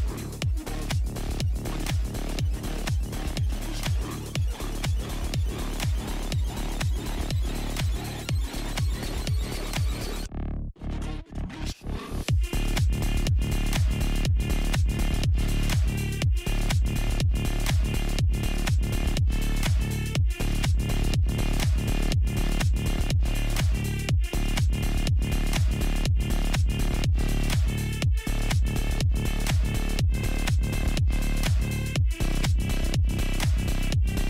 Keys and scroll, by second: 6.7-8.0 typing, 11.6 alt+i.